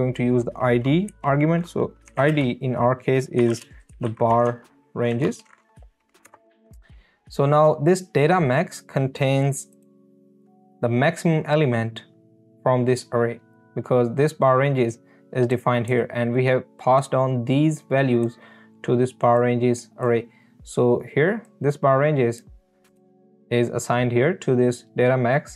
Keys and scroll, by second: 1.2 Right, 1.8-5.1 typing, 6.3 Return.